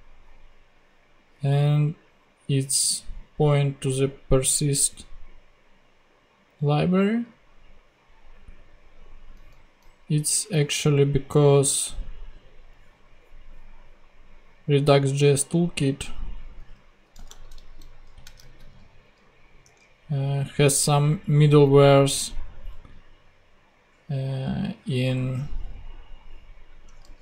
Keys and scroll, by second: 17.4 alt+shift+Right, 18.3 alt+shift+super+Right, 18.4 alt+shift+super+c, 19.0 super+Tab, 27.0 super+v.